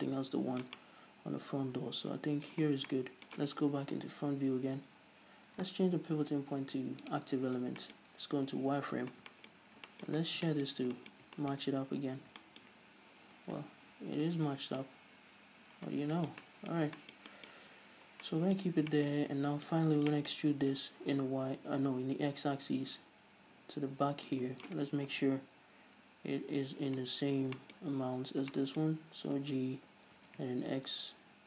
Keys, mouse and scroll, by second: 1.2-24.3 middle drag, 3.1 scroll down 2, 4.3 KP_1, 5.1-6.6 scroll up 2, 6.6 ., 7.8 scroll down 1, 8.6 z, 9.6 scroll down 1, 10.0 scroll up 1, 10.6 scroll down 1, 12.0 scroll up 1, 13.8-14.2 scroll down 1, 14.2 ctrl+z, 15.1 ctrl+shift+z, 16.0-16.4 scroll down 1, 18.1 z, 18.5 scroll down 1, 19.1 scroll up 1, 20.3 scroll up 1, 21.7 e, 24.8 shift+click, 25.6 KP_1, 26.9 z, 27.6 scroll up 1, 28.0-31.4 shift+middle drag, 30.2 g.